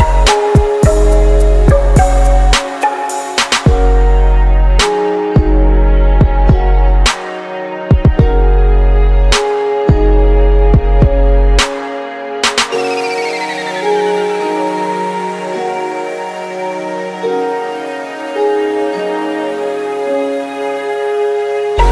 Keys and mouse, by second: 1.0-2.2 right drag, 2.1 ctrl+Down, 2.6 right click, 3.9-5.9 right drag, 6.2-16.8 drag, 17.2 ctrl+Down, 18.4 s.